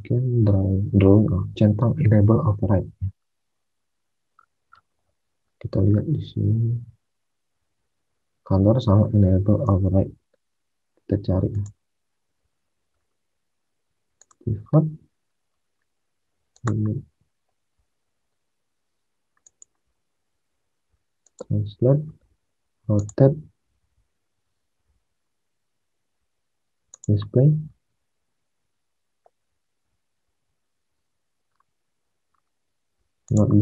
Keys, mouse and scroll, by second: 9.7 alt+Tab, 16.4 click, 26.8 click, 33.2 click.